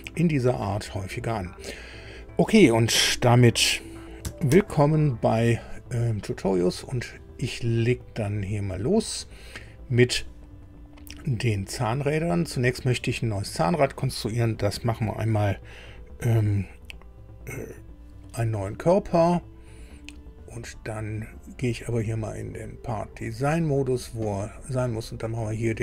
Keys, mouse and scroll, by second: 4.5 super+i, 8.2 middle click, 9.5 middle click, 21.3 click, 23.3 click, 25.4 click.